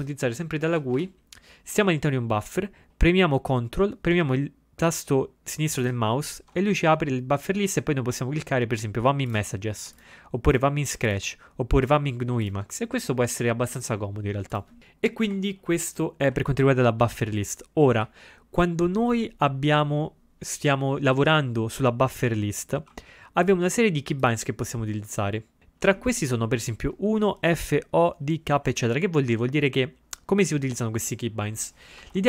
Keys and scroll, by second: 0.7 ctrl+x, 1.0 0, 32.1 ctrl+a.